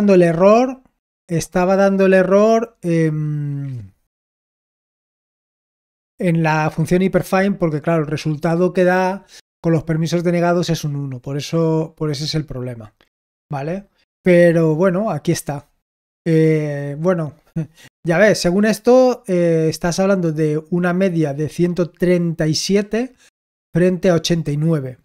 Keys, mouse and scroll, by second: 21.0-22.9 drag, 23.9 click.